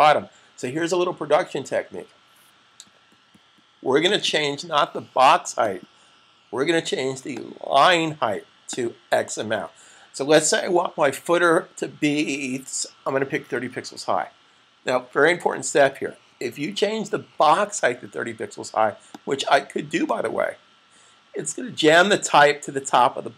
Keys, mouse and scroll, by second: 4.0 click, 13.4 typing, 19.0 click.